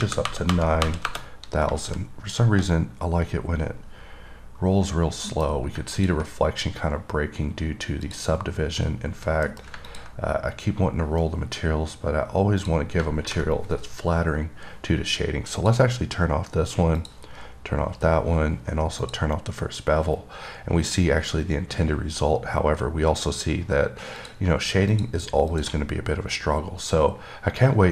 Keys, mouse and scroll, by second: 6.2 click, 6.8-7.7 scroll up 1, 7.7-8.3 scroll down 1, 8.3 click, 10.2 click, 10.6-11.2 scroll up 1, 11.2-11.9 scroll up 1, 11.9-12.9 scroll up 1, 12.9 click, 15.8 click, 17.2 click, 19.3 click, 24.5 click, 25.2 click, 25.8 click.